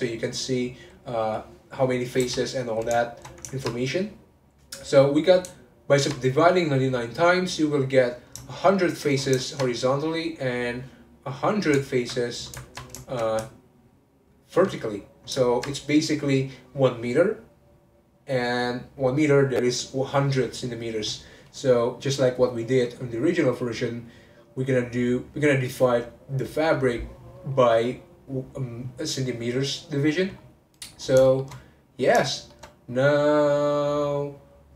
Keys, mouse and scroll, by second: 0.9-1.8 scroll up 3, 2.2 n, 3.0-4.6 shift+middle drag, 4.6 click, 5.8 ctrl+click, 8.4-10.3 shift+middle drag, 10.3 click, 11.4 click, 12.5-13.8 ctrl+middle drag, 13.8 alt+click, 14.3 alt+click, 15.4-18.6 ctrl+middle drag, 30.3-30.7 scroll up 3, 30.7 click, 31.0 scroll down 1, 31.2-34.7 shift+middle drag.